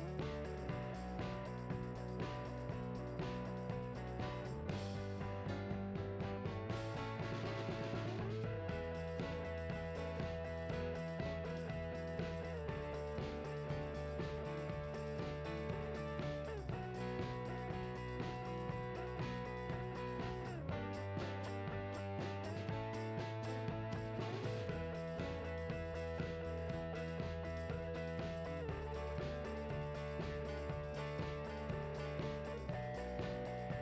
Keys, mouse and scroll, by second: 1.6 alt+a, 1.8 KP_0, 2.0-2.8 scroll up 2, 2.8 scroll up 1, 2.9 click, 3.5 s, 4.0 click, 6.1 `, 6.4-7.0 scroll up 2, 7.0 click, 7.2 g, 8.0 click, 8.3 click, 8.6 Tab, 9.0 click, 9.2 shift+click, 9.5 ctrl+l, 10.4 scroll up 1, 11.4 Tab, 11.5 scroll down 1, 11.8 KP_0, 12.0-12.4 scroll up 1, 12.5 scroll down 1, 12.7 g, 13.6 click, 14.2 Tab, 14.4 click, 14.6 KP_1, 14.8 scroll up 2, 15.1 z, 15.2 alt+a, 15.6 z, 15.8-16.4 scroll up 2, 16.4 b, 18.2 right click, 18.4 Tab, 18.6 click, 18.8 Tab, 19.0 g, 20.0 click, 20.2 scroll down 1, 20.8 alt+a, 23.1 alt+a, 25.2 scroll down 1, 25.4 scroll up 1, 26.1 Tab, 26.5 z, 26.6 `, 27.1 Tab, 27.3 click, 28.3 Tab, 28.4-29.0 scroll down 4, 28.6 KP_0, 29.0 alt+a, 30.5-30.8 scroll down 4, 30.6-33.0 typing, 31.4-31.7 shift+right drag, 32.9 scroll up 1.